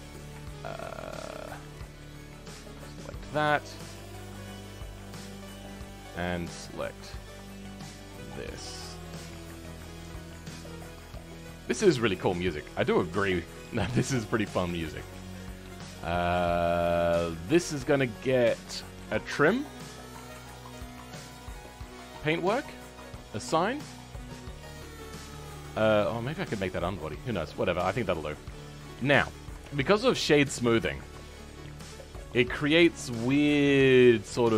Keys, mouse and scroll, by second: 2.3 alt+shift+click, 2.9-6.8 middle drag, 6.8 alt+shift+click, 7.4-9.1 middle drag, 9.1 alt+shift+click, 9.4-10.6 scroll up 2, 10.6 alt+shift+click, 11.2 scroll down 3, 11.4-14.2 middle drag, 14.2-14.7 scroll up 1, 14.7-22.4 shift+middle drag, 22.4-23.6 drag, 23.6 scroll down 2, 24.7-27.1 middle drag, 27.1-28.3 scroll up 5, 28.3-29.6 middle drag, 29.6 Tab, 29.8-31.7 middle drag, 31.7 right click, 32.0-34.5 middle drag.